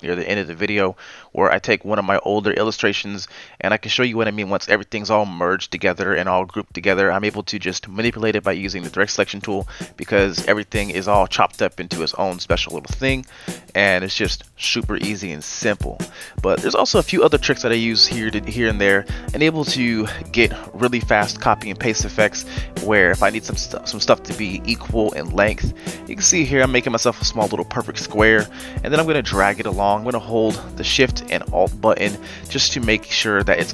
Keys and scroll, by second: 12.4 ctrl+z, 12.7 ctrl+z, 17.3-19.2 z, 21.3 m, 27.3 v.